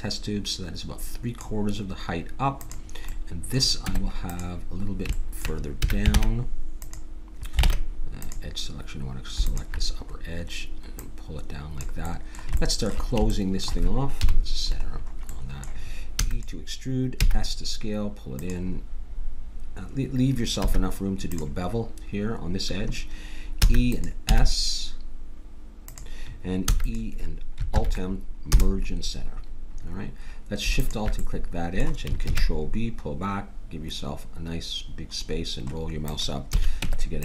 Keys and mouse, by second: 2.5 click, 3.1 middle click, 3.8 Tab, 3.8 click, 5.8 a, 6.1 ctrl+Tab, 7.6 ctrl+Tab, 9.5-12.3 drag, 12.3 middle click, 14.2 KP_Decimal, 16.1 e, 17.2 s, 20.6 s, 23.6 e, 24.2 s, 26.6 e, 27.7 alt+m, 30.8-32.7 drag, 32.2 ctrl+b, 36.5 a, 36.7 Tab.